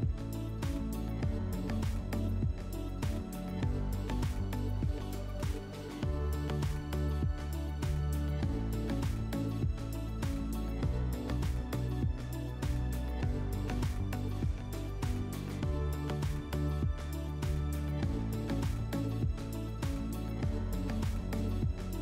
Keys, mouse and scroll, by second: 17.4 click, 19.2 alt+middle click, 19.9 click, 20.6 middle click.